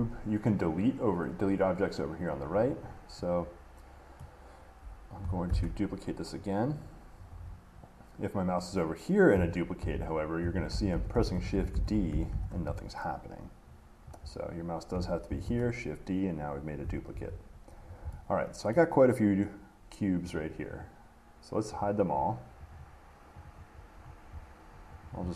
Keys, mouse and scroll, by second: 1.0 click, 2.5 click, 4.4 middle click, 5.7 d, 7.5 Escape, 10.0-12.5 typing, 15.5 d, 17.3 Escape, 18.0-18.3 scroll up 3, 18.9 middle click, 20.6-24.3 drag, 24.3 middle click, 25.2 click.